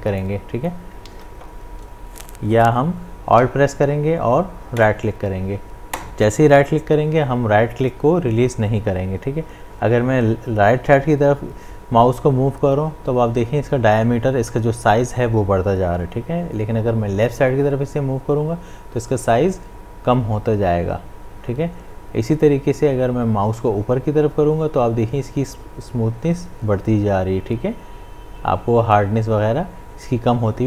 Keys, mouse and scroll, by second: 1.1 ctrl+z, 3.9 ctrl+z, 4.8-15.9 alt+right drag.